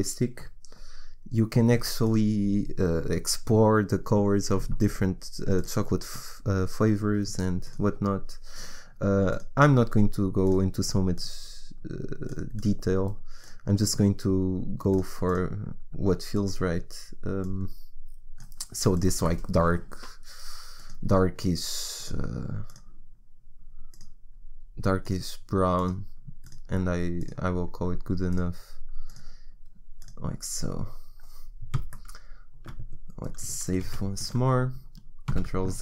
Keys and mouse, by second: 5.6-30.3 drag, 30.3-32.3 middle drag, 33.8 ctrl+s.